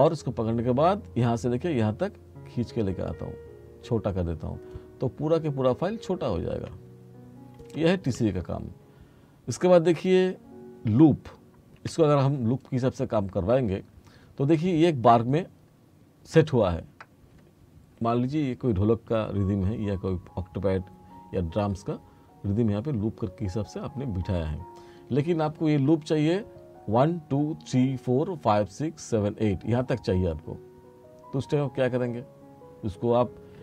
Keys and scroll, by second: 11.9 F4.